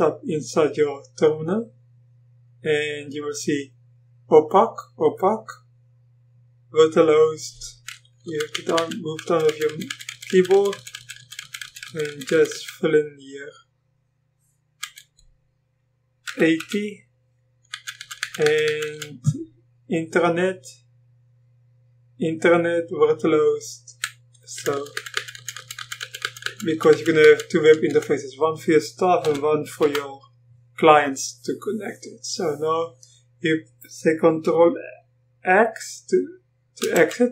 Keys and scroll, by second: 8.3 Down, 8.8 Down, 9.3 Right, 9.5 Right, 9.7 Right, 9.9-11.0 Right, 11.2-15.0 Right, 16.3-16.6 typing, 17.7 Down, 18.3 Down, 24.6 Down, 24.8 Down, 25.0 Down, 25.2-29.3 Down, 27.9-32.1 Left, 29.3 8, 29.9 1, 31.9-32.6 typing, 36.9 ctrl+x.